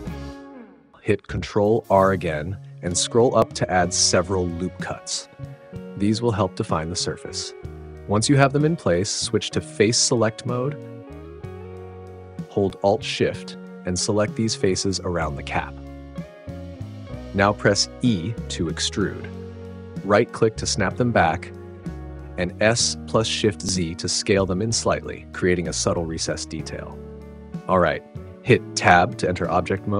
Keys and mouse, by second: 0.7 click, 3.4 ctrl+r, 9.7 click, 15.2 alt+shift+click, 18.0 e, 20.3 click, 21.9 s, 23.7 shift+z, 27.7 click, 29.0 Tab.